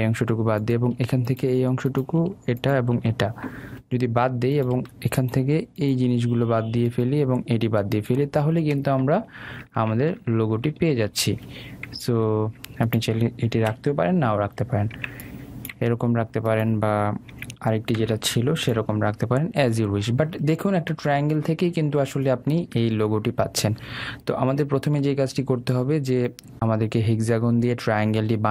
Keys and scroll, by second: 9.0 super+space, 13.6 Delete.